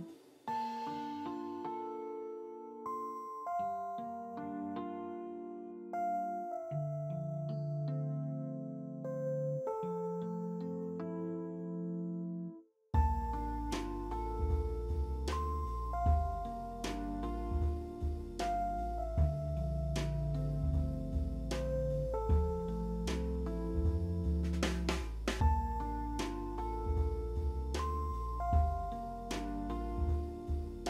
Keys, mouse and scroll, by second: 3.4 e, 15.4 p, 15.7-16.2 scroll down 3, 16.2 ctrl+d, 16.2 alt+middle click, 16.4 middle click, 17.3 double click, 18.1 alt+middle click, 18.4 alt+middle click, 18.8 alt+middle click, 19.5 ctrl+alt+middle click, 20.4 ctrl+alt+middle click, 21.1 middle click, 23.2 middle click, 26.2 double click, 26.3 double click, 27.8 KP_3, 28.0 KP_0, 28.0 KP_0, 28.9 Tab, 29.1 KP_4, 29.2 KP_0, 29.5 KP_0, 29.5 Return.